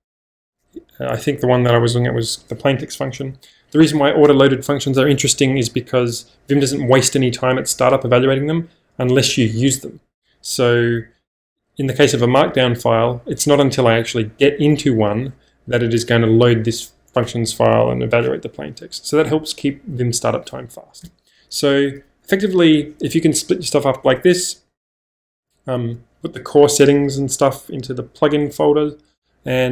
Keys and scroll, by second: 21.0 -.